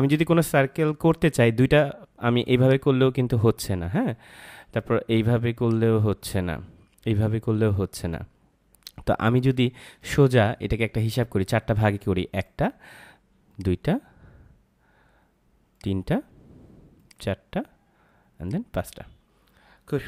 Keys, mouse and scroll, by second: 2.6 click, 5.6 click, 9.3 ctrl+z, 10.6 ctrl+z, 12.2 click.